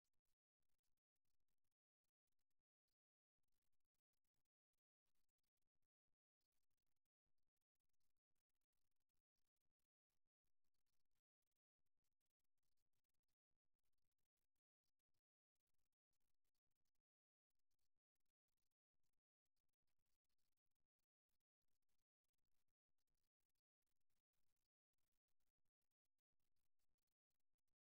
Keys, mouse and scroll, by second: 6.4-8.2 drag, 10.1-11.8 drag, 14.6-16.6 drag, 17.8-19.6 right drag, 19.8 e, 24.2 e, 27.6 e.